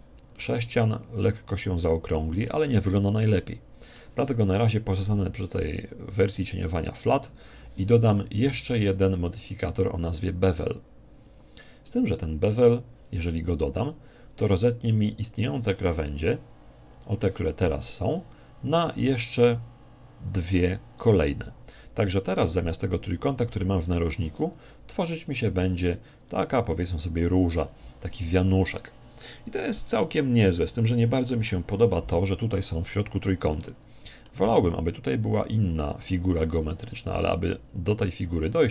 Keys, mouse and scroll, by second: 2.7-4.4 middle drag, 5.1 click, 6.3-8.4 middle drag, 12.5 click, 14.4-16.1 middle drag, 16.9 click, 22.1-25.4 middle drag, 25.4 click, 26.3-28.5 middle drag, 33.7-35.4 middle drag, 35.5 Tab, 38.0-38.7 middle drag.